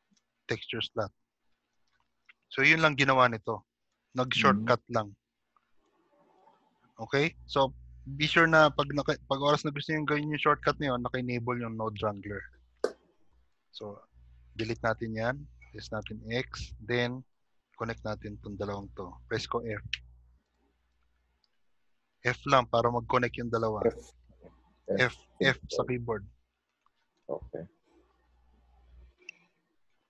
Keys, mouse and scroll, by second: 1.4-1.7 scroll down 1, 2.3 shift+middle click, 2.3-2.7 scroll down 3, 4.4 click, 7.1 click, 8.9 g, 10.7 g, 14.9 shift+middle click, 14.9 click, 14.9 x, 15.7 click, 16.1 g, 16.9-17.6 scroll up 1, 18.6 click, 18.6 scroll up 4, 20.0 f, 22.1 middle click.